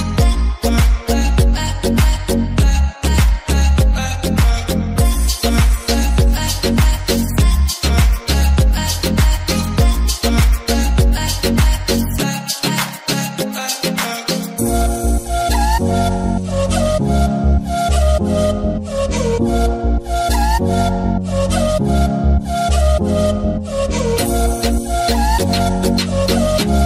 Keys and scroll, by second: 19.2 Delete, 25.6-26.8 typing.